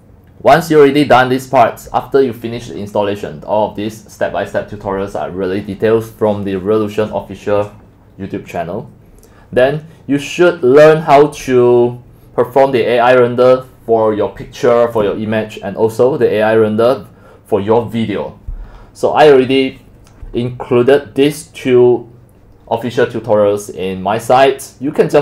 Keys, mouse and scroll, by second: 2.7-4.5 scroll down 2, 4.5-5.9 scroll down 1, 5.9 scroll down 1, 5.9-8.7 scroll up 1, 8.7-9.3 scroll up 1, 9.4-11.6 scroll down 13, 11.6-13.3 scroll up 10, 13.3-14.4 scroll down 10, 14.4-14.8 scroll down 1, 14.8 scroll, 15.5-15.9 scroll down 3, 18.7-19.3 scroll down 6, 19.3 scroll, 21.6-22.3 scroll down 10, 23.4-23.8 scroll down 4, 23.8-24.2 scroll up 4.